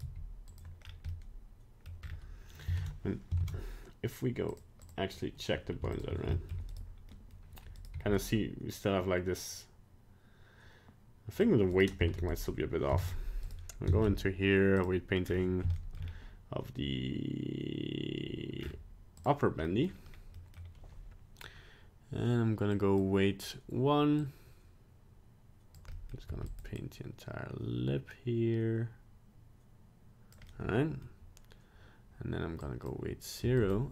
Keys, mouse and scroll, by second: 0.0 right click, 0.2 g, 0.8 scroll down 2, 1.1 middle click, 2.0 scroll up 4, 2.9 ctrl+Tab, 3.5 ctrl+Tab, 4.5 click, 4.8 click, 6.0 shift+click, 6.2 shift+click, 6.3 shift+middle click, 6.8 right click, 7.1 middle click, 7.9 right click, 8.0 g, 11.8 right click, 12.2 ctrl+Tab, 12.3 right click, 12.9 ctrl+Tab, 13.9 ctrl+Tab, 15.2 scroll up 4, 15.7 shift+middle click, 16.0 scroll down 2, 18.7-19.3 scroll down 5, 19.3 click, 19.6 middle click, 20.1 scroll up 1, 20.3 middle click, 22.7 click, 24.3 click, 25.9 middle click, 26.2 f, 26.9 click, 30.5 middle click, 32.6 click, 33.4 f.